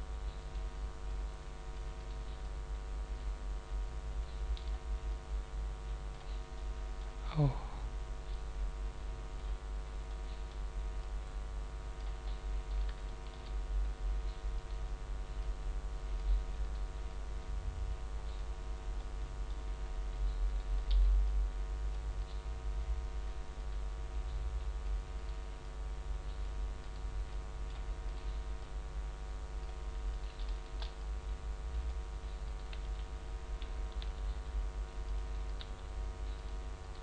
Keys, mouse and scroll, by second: 0.3 right click, 1.2 click, 1.9 right click, 2.3 click, 5.0 click, 6.5 middle click, 7.3-7.7 scroll down 5, 8.3 click, 10.0 middle click, 10.9 click, 12.3 middle click, 13.0 shift+middle click, 13.7 click, 14.5 shift+middle click, 14.5 right click, 15.3 click, 17.0 click, 18.9 middle click, 19.7-20.4 scroll up 1, 20.4 right click, 21.2 click, 23.5 click, 25.1 right click, 25.5 click, 26.8 right click, 28.0 right click, 28.5 click, 30.1 right click, 30.5 shift+right click, 30.9 click, 32.4 right click, 34.0 g, 35.3 click, 35.4 right click, 35.5 g, 36.4 click, 36.8 right click, 36.9 g.